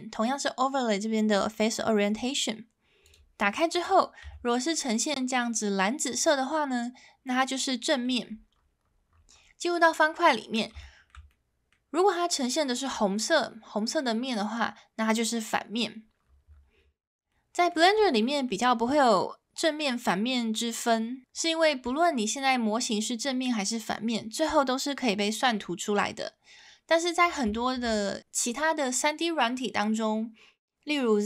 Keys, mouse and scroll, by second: 4.3 Tab, 4.7 middle drag, 6.4-8.0 middle drag, 9.7-10.3 middle drag, 10.8 shift+middle drag, 11.3-11.7 middle drag, 12.7-14.3 middle drag, 17.3-17.7 middle drag, 18.2 middle drag, 22.0-23.3 middle drag, 27.5 shift+middle drag.